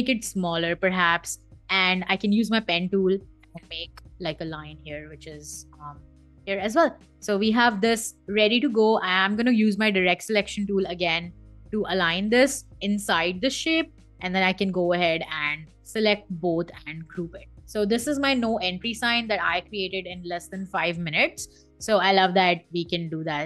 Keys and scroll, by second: 2.7 p, 5.6 v, 10.4 a, 15.3 v, 16.8 super+g.